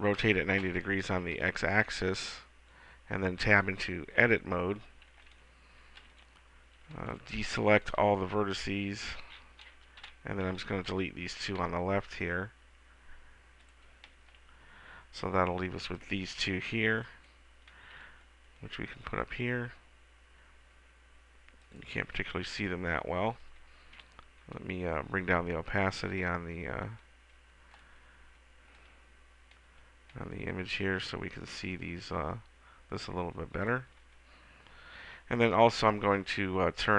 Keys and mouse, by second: 1.5 Tab, 6.1 a, 7.1 b, 10.2 Delete, 16.0 b, 18.2 g, 22.0-23.8 drag, 26.4-28.3 drag, 29.0-30.0 drag.